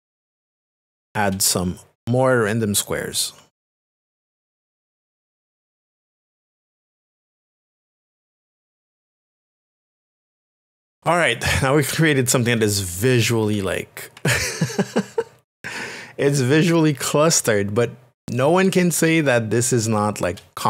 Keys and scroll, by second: 4.6-11.0 typing, 10.0 ctrl+z, 14.2 ctrl+KP_Subtract, 18.2 space.